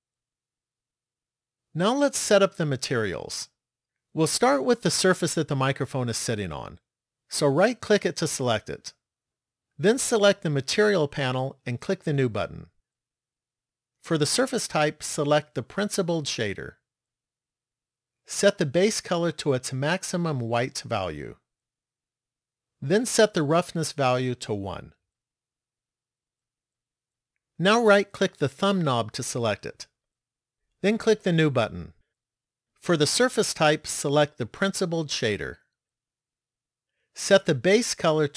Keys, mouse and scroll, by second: 7.5 right click, 10.8 click, 12.2 click, 14.2 click, 18.9 click, 24.6 click, 28.5 right click, 31.5 click, 33.4 click, 37.3 click.